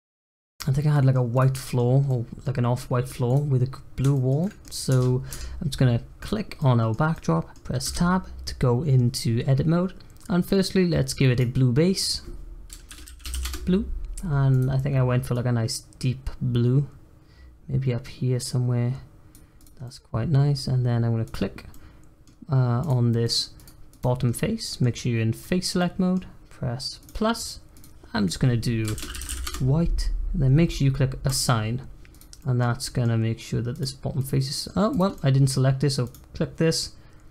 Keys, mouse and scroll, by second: 0.9 middle click, 1.3 click, 1.5 middle click, 1.8 scroll down 1, 2.0 middle click, 2.4-2.8 scroll up 1, 2.8 middle click, 3.3 click, 4.1 shift+middle click, 4.8 Tab, 5.1 scroll down 1, 5.3 Tab, 5.8-6.1 scroll down 1, 6.1 click, 6.5-7.8 middle drag, 7.8 Tab, 11.3-14.5 drag, 19.5 click, 19.8 middle click, 20.7-21.2 scroll up 1, 21.2 click, 21.7-22.8 middle drag, 22.8 click, 23.2 middle click, 23.5 click, 23.9 click, 24.3-27.0 middle drag, 27.0-32.1 drag, 32.3-33.7 middle drag, 33.7 click, 34.1 middle click, 34.9 click, 35.1 middle click, 36.0 click.